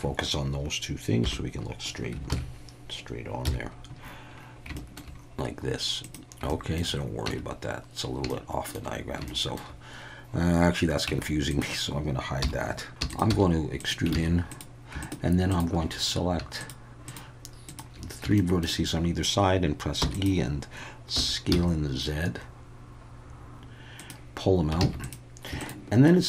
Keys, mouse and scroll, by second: 1.2 /, 2.3 ctrl+KP_3, 3.4 KP_1, 4.7 shift+middle drag, 6.0 click, 6.6 shift+middle click, 7.3 Tab, 8.3 shift+middle click, 9.3 shift+middle click, 11.1 Tab, 11.5 click, 12.4 h, 13.0 Tab, 13.0 e, 13.3 s, 13.8 click, 14.1 alt+a, 14.5 click, 15.0 shift+click, 16.6 shift+click, 17.0 shift+click, 17.7 shift+click, 18.4 shift+middle click, 20.0 e, 20.1 click, 21.1 s, 21.5 z, 23.9 click, 24.8 alt+a, 25.0 click, 25.6-26.2 shift+drag.